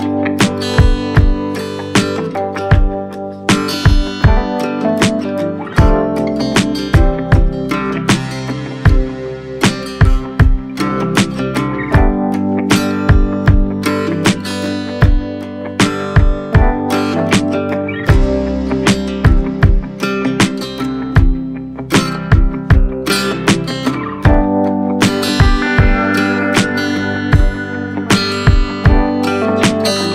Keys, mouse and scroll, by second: 1.5-3.4 drag, 3.8-7.3 drag, 7.3-9.2 scroll up 7, 9.2 click, 9.7-11.6 drag, 11.8-13.7 drag, 13.8-15.5 drag, 15.5-16.0 scroll up 3, 16.0-17.2 scroll down 1, 17.2 right click, 22.4 right click, 23.8 shift+g, 27.4-29.3 drag.